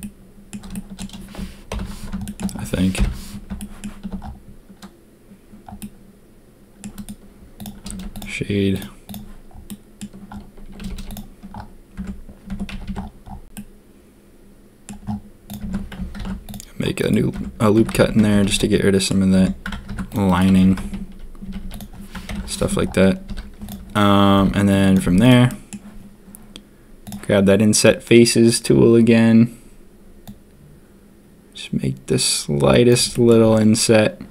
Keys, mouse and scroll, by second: 0.0-0.5 drag, 0.7 shift+drag, 1.7 ctrl+KP_3, 2.9 ctrl+KP_1, 3.6 shift+click, 5.8-6.8 drag, 7.9 ctrl+a, 9.0 click, 9.6-10.0 drag, 10.8 a, 10.9 a, 11.9 Tab, 12.5 Tab, 12.7 a, 12.8 a, 13.5-14.8 drag, 15.5 Tab, 16.1 ctrl+r, 17.3 Tab, 17.7 Tab, 17.9 a, 18.0 a, 18.1 Tab, 18.3 a, 18.4 a, 18.5-19.0 drag, 19.3 Tab, 19.8 ctrl+r, 20.5 a, 20.6 a, 20.7 Tab, 21.4 a, 21.6 a, 22.2 ctrl+KP_3, 22.5 Tab, 23.2 z, 24.3 b, 25.0 z, 25.4 middle click, 27.0 click, 33.1 click.